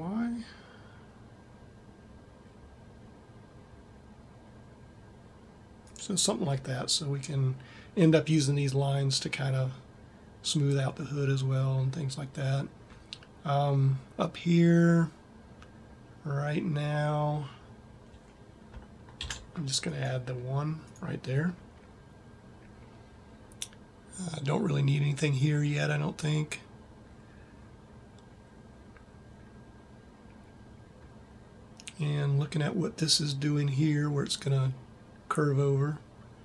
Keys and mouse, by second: 19.0 ctrl+r.